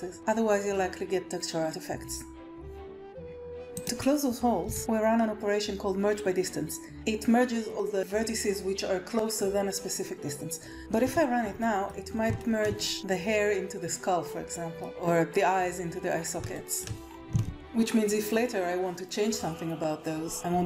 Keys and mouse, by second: 3.4 Tab, 3.4 KP_1, 3.7 click, 4.6 g, 11.0 a, 11.5 click, 12.3 shift+click, 14.7-16.0 middle drag, 16.5 shift+middle click, 17.4 alt+a.